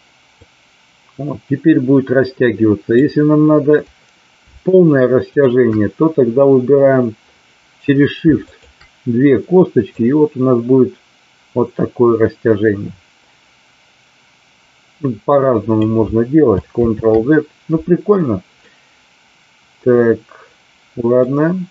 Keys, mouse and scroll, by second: 0.2-3.0 drag, 8.5 shift+click, 9.9-15.7 drag, 16.8 ctrl+z, 18.5-21.3 middle drag.